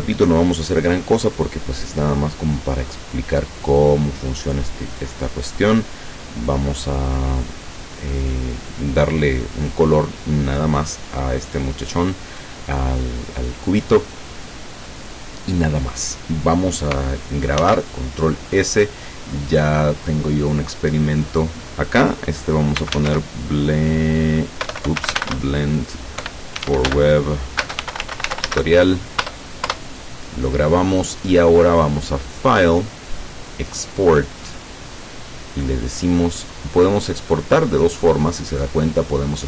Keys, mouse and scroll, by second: 0.7 click, 3.7 click, 5.0-6.7 drag, 17.6 ctrl+s, 19.5 click, 22.5-23.6 typing, 24.7-29.2 typing, 29.3 Return, 32.5 click.